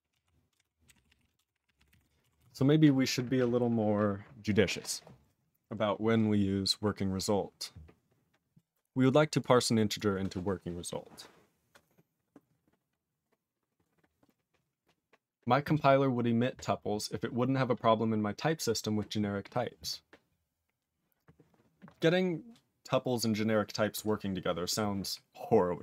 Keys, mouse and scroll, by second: 0.1 ctrl+a, 0.5 ctrl+space, 0.6 ctrl+e, 0.9 ctrl+g, 1.0 ctrl+p, 1.1 ctrl+p, 1.4 ctrl+space, 1.4 ctrl+p, 1.5 ctrl+p, 1.7 ctrl+p, 1.8 ctrl+p, 1.9 ctrl+g, 1.9 ctrl+e, 2.4 ctrl+s, 3.0 scroll up 6, 4.1-5.8 scroll up 18, 6.2-6.8 scroll up 6, 7.5 scroll down 10, 9.1 click, 9.2 click, 9.4 click, 10.0 click, 13.3-14.2 scroll down 5.